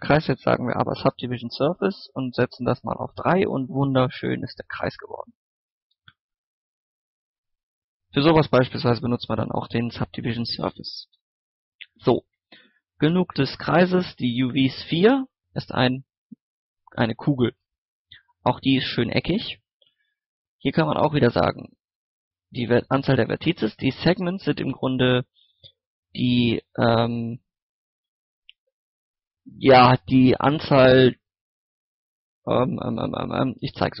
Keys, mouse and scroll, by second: 0.4 scroll up 1, 0.6-1.7 middle drag, 1.9 click, 3.4 middle click, 3.9 scroll up 1, 5.1 Tab, 5.7 scroll down 1, 5.8 Tab, 8.4 click, 10.5 middle click, 11.4 click, 12.0 shift+a, 13.9 click, 14.4 middle click, 14.8 scroll up 1, 14.9 middle click, 15.2 scroll down 1, 15.4 middle click, 17.5 scroll up 1, 20.5-23.3 drag, 30.5 scroll down 1, 30.7-32.9 middle drag, 33.1 scroll up 1, 33.9 click.